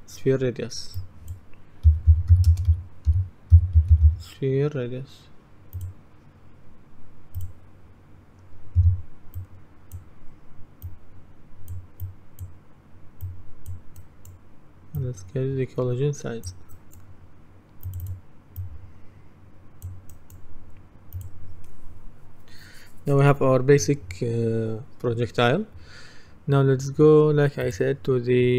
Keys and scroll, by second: 1.7-4.6 typing, 8.8 Delete.